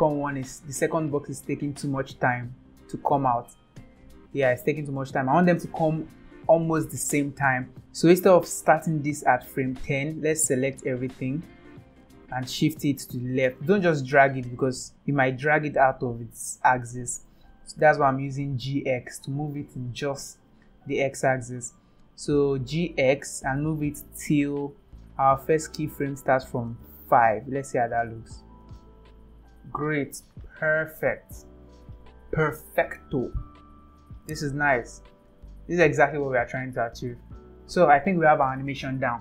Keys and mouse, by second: 3.4 space, 4.4 space, 7.7 click, 8.8 click, 10.5-11.5 drag, 14.1-16.7 drag, 17.4 ctrl+z, 22.7 g, 27.2-28.2 drag, 28.6 space, 30.7 click, 31.8 click, 33.7 click, 34.6 click, 36.5 click, 37.5 click, 38.2 space.